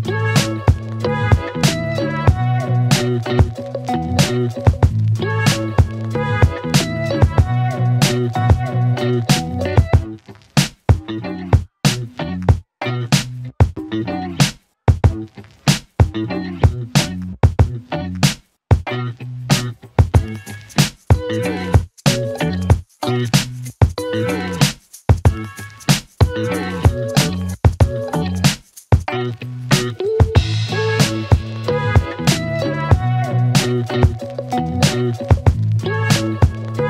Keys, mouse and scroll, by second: 2.1-3.0 typing, 3.5 Return, 4.9-5.3 typing, 6.3 Return, 8.2 click, 9.7-10.8 scroll down 1, 10.8-14.3 drag, 15.1-16.3 scroll up 1, 16.3-21.1 click, 25.2-26.1 click, 28.7 Return, 29.4 click, 31.3 click, 32.8 Return, 34.4 click.